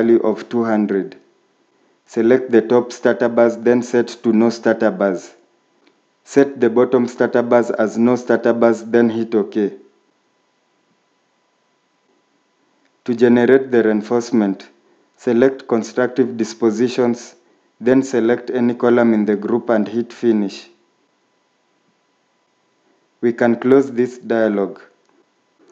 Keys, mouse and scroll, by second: 1.9 typing.